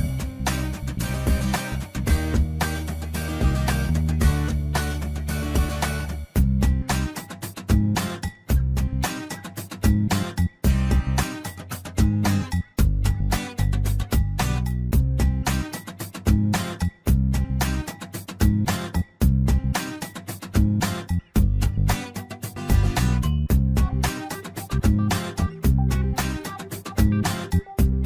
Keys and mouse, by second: 0.0 shift+middle click, 0.7 shift+middle click, 1.2 middle click, 1.8 shift+middle click, 3.0 2, 3.5 click, 4.3 f, 4.8 f, 7.6 1, 9.1 click, 14.7 shift+middle click, 15.7 shift+middle click, 16.3 click, 18.4 shift+middle click, 18.8 middle click, 19.2 Tab, 21.2 shift+middle click, 23.2 shift+middle click, 25.7 e.